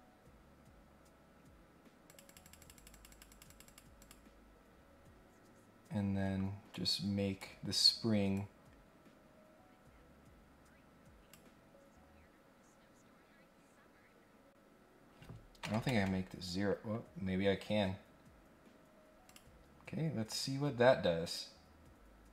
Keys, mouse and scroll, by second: 2.1 click, 2.3 click, 2.6 click, 2.7 click, 3.1 click, 3.3 click, 3.5 click, 3.6 click, 4.0 click, 4.9-5.5 scroll down 2, 6.7 click, 8.3-11.3 drag, 19.2 click, 21.2 click.